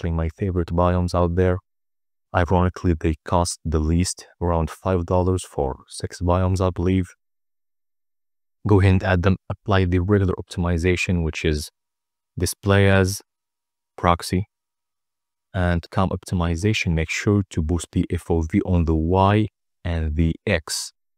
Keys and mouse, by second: 5.8 click, 7.0 click, 8.0 click, 9.0 click, 11.3-13.4 drag, 13.9 click, 15.5-17.8 drag, 19.8 click, 20.1 click.